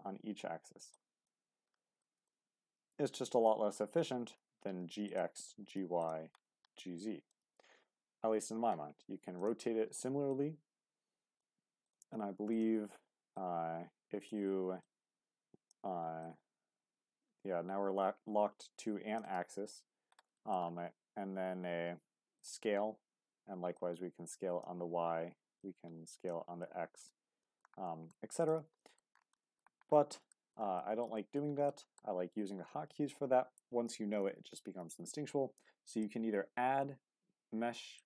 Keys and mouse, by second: 0.9 click, 2.0 shift+middle click, 5.1 click, 6.0 click, 7.3 right click, 9.4 click, 10.3-11.4 drag, 12.5 click, 13.3 click, 14.8 click, 16.2-19.2 drag, 20.3 shift+middle click, 22.4-24.6 drag, 25.6 click, 27.4 shift+drag, 28.8 shift+drag.